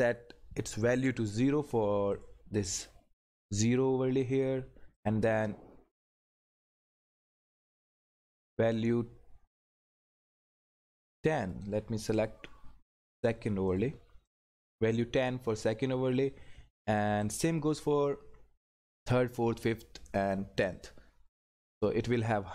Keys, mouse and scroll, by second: 2.1 click, 4.9 click, 10.2 click, 17.2 click, 17.4 click, 20.7 click.